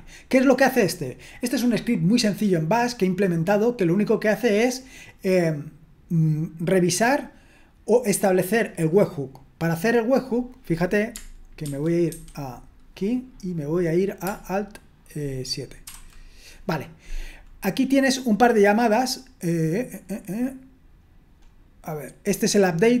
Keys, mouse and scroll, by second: 11.6 super+1, 12.1 super+2, 15.8 alt+7, 21.5-22.2 scroll up 1, 22.2-23.0 scroll down 1.